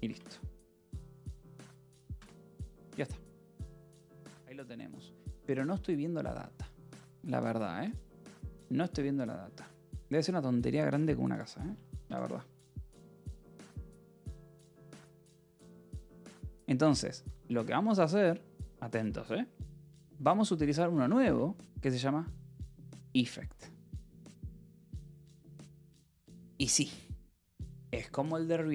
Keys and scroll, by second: 0.0-1.6 typing, 1.8 Escape, 2.7 ctrl+s, 12.4 j, 16.1-17.7 typing, 20.3-21.7 typing, 26.2 9, 27.7 space, 28.4 =.